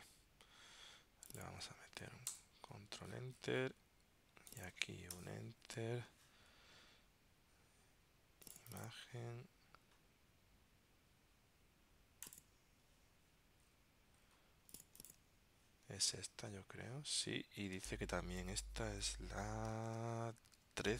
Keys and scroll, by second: 2.4 super+Return, 16.2 super+Tab, 17.8 super+Tab, 20.0 super+Tab.